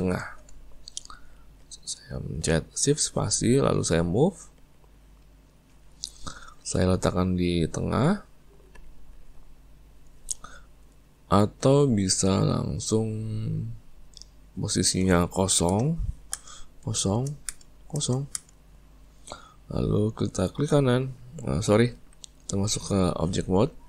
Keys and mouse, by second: 0.3 shift+space, 5.5 click, 7.4 click, 14.5-20.6 drag, 20.6-21.9 right drag, 21.9 Tab.